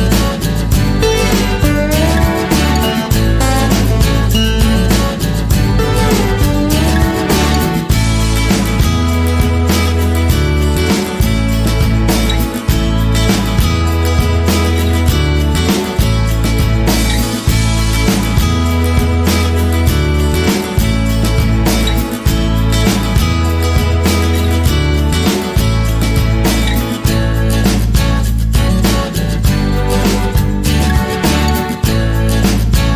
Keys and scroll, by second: 0.0 Right, 12.7 Left.